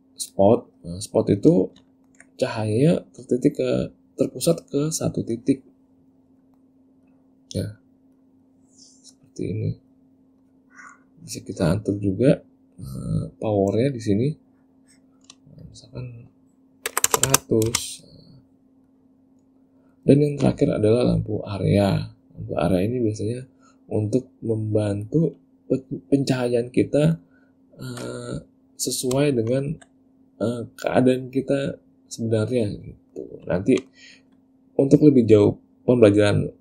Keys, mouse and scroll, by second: 0.5 click, 2.0 ctrl+middle click, 2.6 middle click, 5.5 click, 6.5 middle click, 7.2 click, 8.3 click, 9.3 click, 10.6 click, 14.1 click, 15.8 click, 17.4 KP_0, 19.0 click, 21.6 click, 22.9 click, 24.1 click, 25.2 click, 27.1 middle click, 29.6 ctrl+middle click, 33.1 middle click, 33.8 ctrl+middle click.